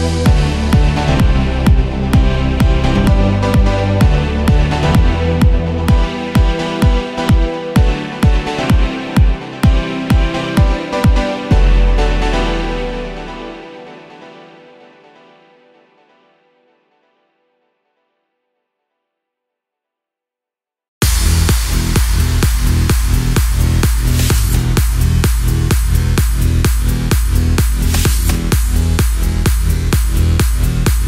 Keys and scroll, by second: 28.3 super+-.